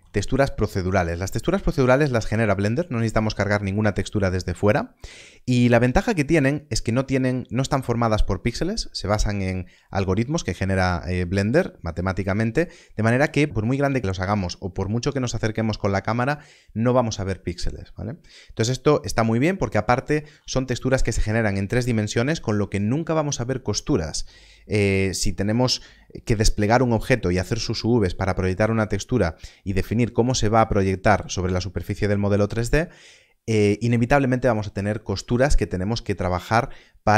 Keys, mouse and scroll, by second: 0.6-1.0 scroll up 1, 1.2 shift+middle click, 2.3 shift+middle click, 3.9 shift+middle click.